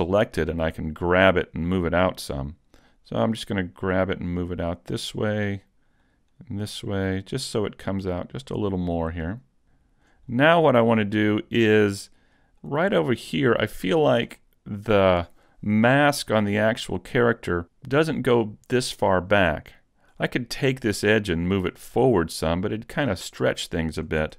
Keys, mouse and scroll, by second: 0.8 middle click, 1.9 middle click, 3.6 click, 6.0 click, 9.2 right click, 9.4 right click, 9.4 middle click, 10.3-10.7 scroll down 2, 11.2 middle click, 12.8 shift+middle click, 13.5-13.8 scroll up 2, 13.8 shift+middle click, 14.4 middle click, 20.2 right click, 21.0 middle click, 22.6 click.